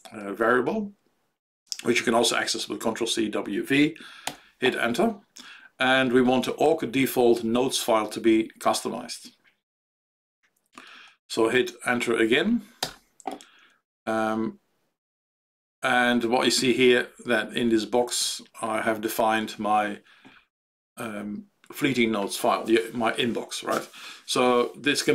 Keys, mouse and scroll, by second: 4.3 alt+x, 16.8 Down, 17.0 Down, 17.2 Down, 17.3 Down, 17.5 Down, 17.7 Down, 17.9 Down, 18.1 End.